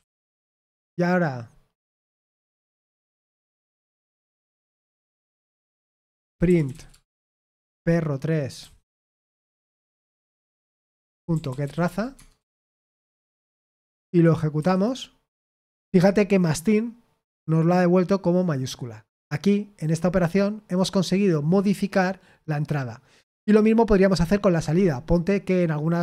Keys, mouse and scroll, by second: 0.0-0.4 typing, 3.7-8.6 typing, 9.7-13.7 typing, 12.1 shift+Tab, 12.8 Escape, 14.5 F5, 17.3-19.0 drag, 19.0 Escape.